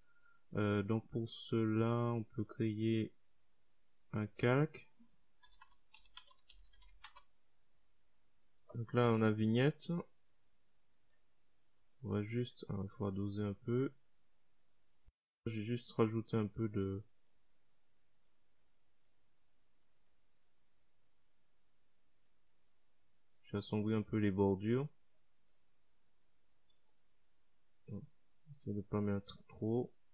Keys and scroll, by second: 5.6-7.7 typing.